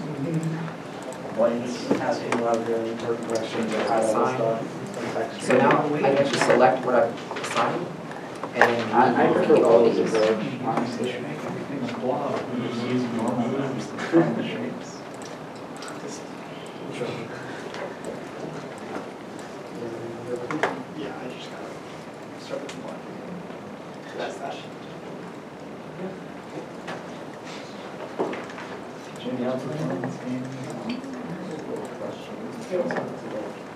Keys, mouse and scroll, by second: 0.0 shift+click, 0.3 shift+click, 4.9 middle click, 5.0 alt+a, 7.7 alt+a, 7.8-8.3 scroll down 1, 8.4-8.8 scroll up 1, 9.3 shift+middle click, 9.7 a, 10.2 u, 12.2 u, 12.3 alt+a, 12.9 middle click, 13.3 scroll down 1, 13.9 middle click, 17.5 shift+click, 18.1 scroll up 1, 18.8 middle click, 19.9 ., 20.4-21.0 scroll, 21.0 middle click, 22.2 shift+click, 22.9 shift+click, 23.1 shift+middle click, 24.5 shift+click, 25.7 shift+middle click, 26.5 shift+click, 27.2 shift+middle click, 28.3 shift+click, 29.2 shift+click, 29.9 shift+click, 32.1 shift+click.